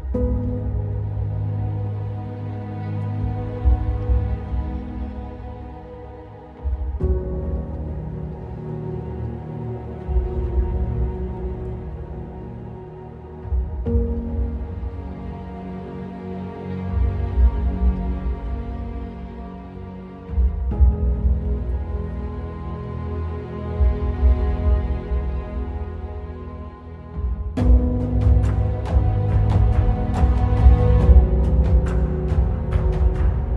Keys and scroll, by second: 12.2 ctrl+z, 13.8 ctrl+alt+t, 15.7 ctrl+alt+shift+t, 16.9 ctrl+alt+shift+Return, 20.9 ctrl+t, 23.9 Return, 25.0 space, 32.0 ctrl+t.